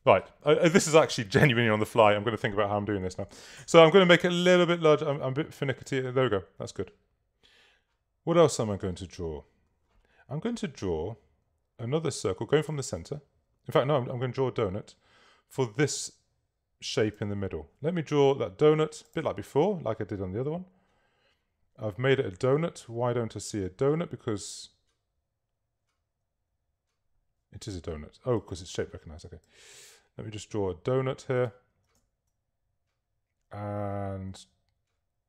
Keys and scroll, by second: 3.7 s.